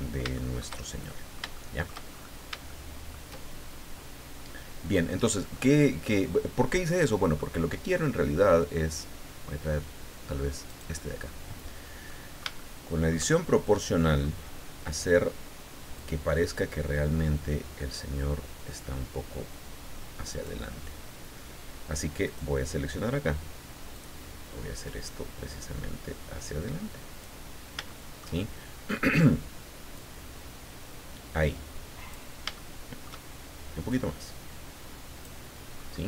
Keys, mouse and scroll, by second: 0.0-0.3 scroll down 3, 0.3 shift+middle click, 1.2 shift+middle click, 2.7 shift+middle click, 4.4 scroll down 2, 5.5-7.6 middle drag, 7.9 middle click, 10.7 right click, 12.1-13.3 middle drag, 13.7 middle click, 16.0 click, 16.6-17.3 scroll down 2, 17.6-17.9 scroll down 1, 22.2 right click, 23.9-24.9 drag, 24.9 scroll down 1, 25.5 scroll down 1, 27.5-27.9 scroll down 2, 27.9 shift+middle click, 29.9-32.3 drag, 32.5 shift+middle click, 33.9-35.4 drag, 35.7-36.0 scroll up 2.